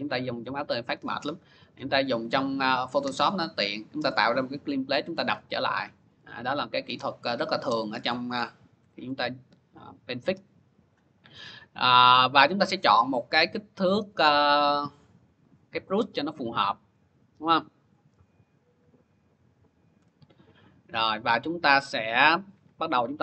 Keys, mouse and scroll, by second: 1.7-2.3 click, 3.4 click, 3.6 click, 3.7 click, 7.5 click, 8.2 ctrl+=, 8.6 ctrl+=, 10.1 click, 13.2 click, 15.8 click, 18.2 [, 18.6 [, 19.8-23.2 ].